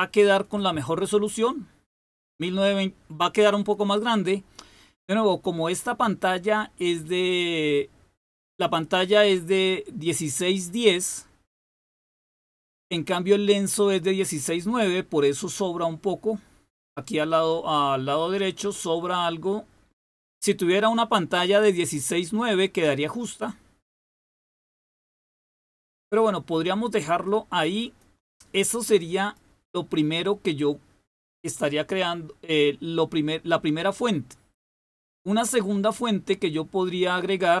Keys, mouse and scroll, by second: 23.2-27.3 drag, 27.8 click, 28.3 click, 29.2 click, 31.4 click, 34.9 click.